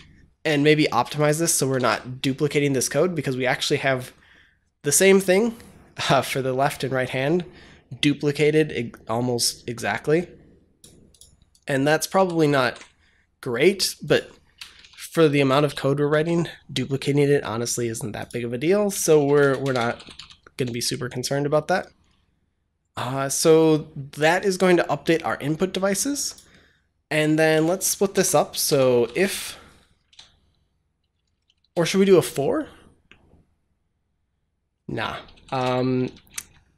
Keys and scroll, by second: 1.6 ctrl+c, 12.0 ctrl+c, 12.3 ctrl+v, 14.5-16.0 typing, 18.8-20.5 typing, 27.4 Return, 28.0 Tab, 28.6-30.1 typing, 35.0-36.0 typing.